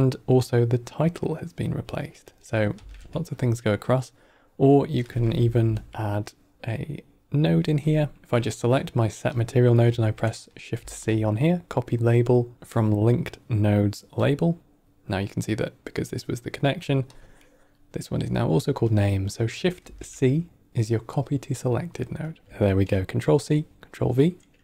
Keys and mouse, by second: 2.8 shift+c, 4.9 click, 5.3 F2, 5.9-7.5 drag, 5.9 middle click, 7.7 click, 8.2-8.9 drag, 10.6 shift+c, 17.0-17.6 drag, 18.8 middle click, 19.7 shift+c, 22.2 middle click, 22.6 middle click.